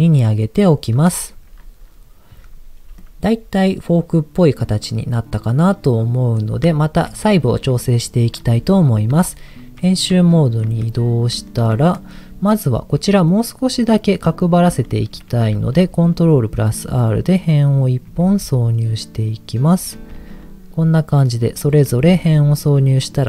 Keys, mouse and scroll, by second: 0.0 click, 2.5 Tab, 2.9-6.5 middle drag, 6.8 shift+middle click, 7.3-7.8 scroll up 1, 8.0-8.3 scroll down 1, 9.1 Tab, 10.5 shift+middle click, 10.7-11.3 scroll up 3, 11.4 shift+middle click, 15.5 ctrl+r, 17.6 click, 18.2 ctrl+r, 19.6 click, 20.1 ctrl+r, 21.5 click, 22.0 ctrl+r.